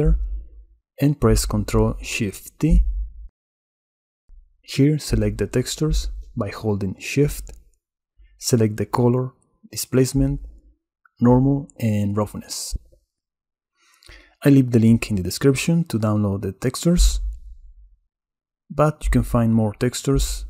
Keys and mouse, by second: 0.0 click, 1.7 click, 4.2 ctrl+shift+t.